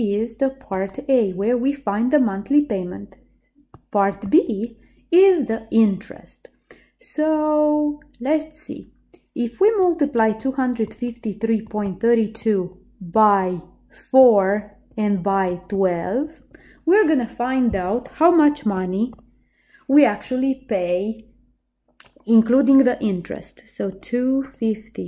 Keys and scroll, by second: 24.0 2, 24.6 5.